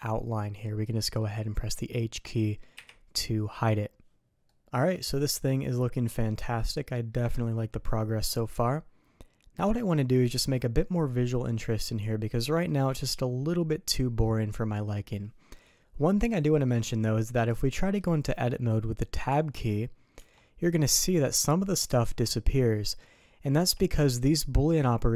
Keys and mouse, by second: 0.4 click, 0.9 click, 2.7 h, 4.4-7.0 drag, 7.0-9.7 middle drag, 10.5 middle click, 11.5-12.6 middle drag, 16.1-16.6 middle drag, 17.3 click, 17.7 middle drag, 19.2 Tab, 20.1 Tab, 22.0 alt+a, 23.5 Tab.